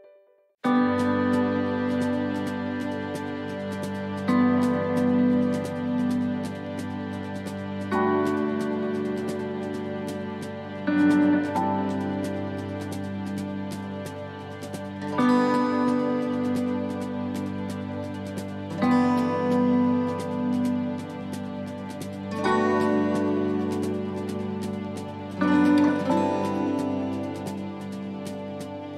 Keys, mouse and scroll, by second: 0.7 right click, 1.5 scroll up 1, 1.7 click, 5.9 scroll down 5, 6.5 shift+middle click, 7.0-7.5 scroll up 2, 7.5 shift+middle click, 8.4 shift+right click, 8.9 shift+right click, 9.5 shift+right click, 10.3 click, 16.4 right click, 18.2 shift+right click, 19.5 right click, 20.7 right click, 20.9 shift+right click, 22.4 shift+right click, 22.5 shift+right click, 24.4 click, 27.5 right click, 28.8 shift+right click.